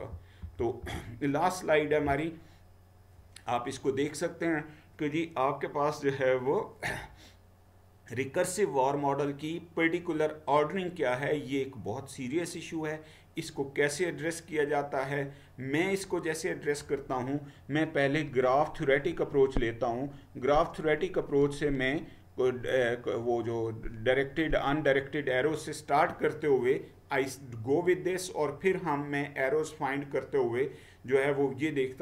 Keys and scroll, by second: 0.0 Down, 0.5 Down, 0.9 Down.